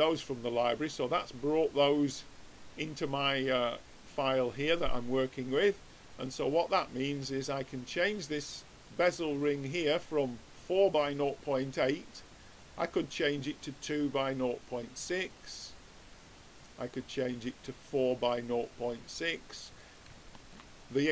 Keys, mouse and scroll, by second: 1.2-7.6 middle drag, 7.6 click, 9.5-11.3 drag, 14.8-16.8 drag, 18.6-20.9 middle drag.